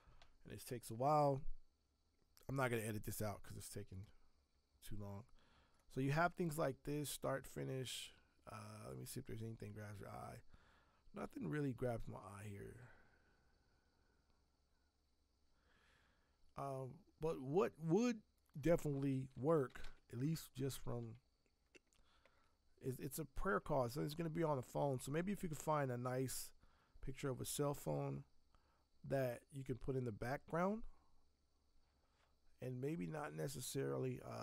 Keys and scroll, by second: 19.1-20.3 typing.